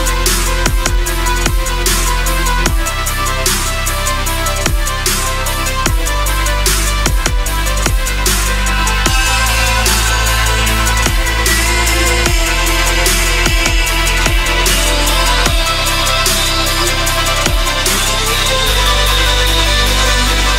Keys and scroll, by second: 2.5 ctrl+z, 10.8 Caps_Lock, 12.0 l, 13.1-14.9 typing, 15.6 Return, 15.9-20.1 typing, 16.4 Return.